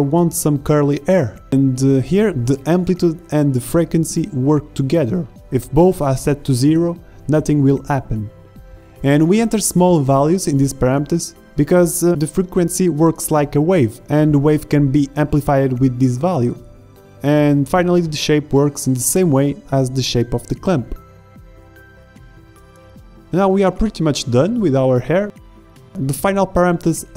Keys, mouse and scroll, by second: 3.2-7.6 drag, 4.3 KP_0, 14.9-15.6 middle drag, 15.6-18.4 drag, 23.4 shift+z, 25.2 z.